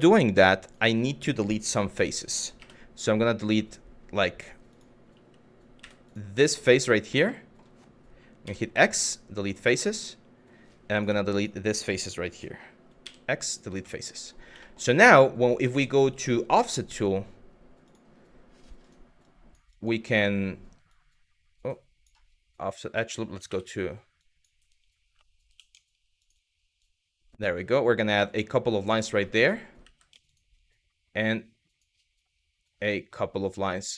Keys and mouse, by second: 0.3 click, 2.2 3, 5.4 w, 5.7 click, 6.1 click, 6.9 middle click, 8.1 x, 9.5 middle click, 10.6 click, 11.0 click, 12.6 x, 13.5 middle click, 14.3 middle click, 18.5 click, 18.8 click, 20.6-21.8 drag, 23.1 2, 23.8 click, 25.1 2, 25.8 alt+click, 26.4 click, 28.8 shift+middle click, 29.4 w, 29.9 click, 31.2 click, 32.5 click, 33.4 click.